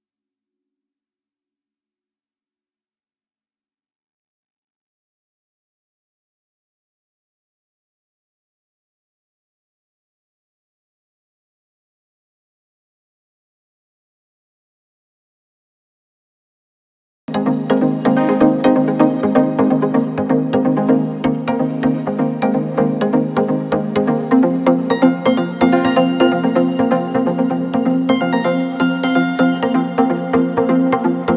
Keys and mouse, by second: 1.2 click, 3.8-6.9 drag, 9.1 click, 17.2 click, 19.0 shift+click, 23.6 shift+click, 27.4 click, 28.4 shift+click, 29.7 shift+click.